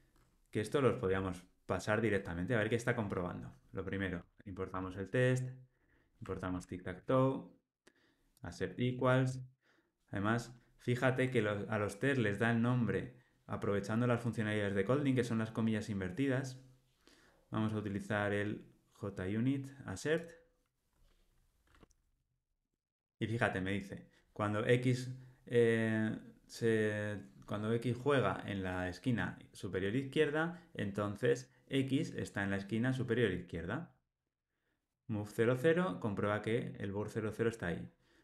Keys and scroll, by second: 1.0 Tab, 4.1 Tab, 22.4 alt+super+l, 22.8 ctrl+alt+o.